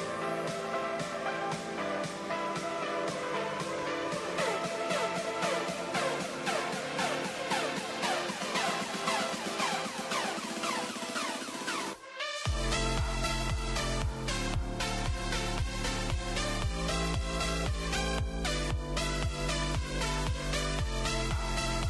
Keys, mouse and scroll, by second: 0.4 shift+click, 1.6 alt+m, 3.0-8.4 middle drag, 9.3 click, 9.7 click, 11.0 shift+click, 12.6 s, 19.9 Tab, 20.1 middle click, 20.6 middle drag, 20.9 scroll up 2, 21.0-21.4 scroll down 4, 21.4-21.8 middle drag.